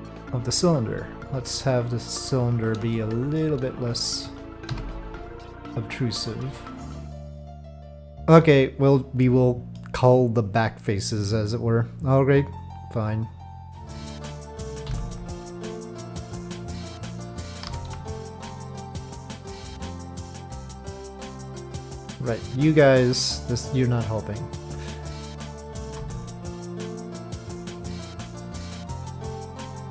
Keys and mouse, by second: 1.5 click, 2.9-3.4 shift+middle drag, 6.6 click, 9.2-9.8 middle drag, 13.4-13.9 drag, 13.7 Tab, 14.8 Delete, 16.7 alt+click, 17.7 2, 18.1 alt+click, 19.0 middle click, 20.1-25.9 drag, 26.0 3, 27.0 alt+click, 29.4 alt+click.